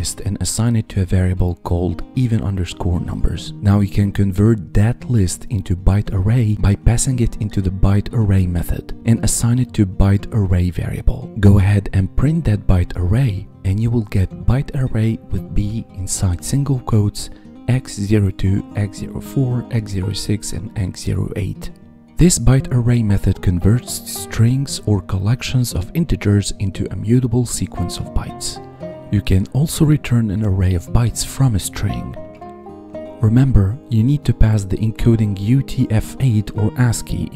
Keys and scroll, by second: 6.1 ctrl+v, 11.9 ctrl+v, 13.5 Tab.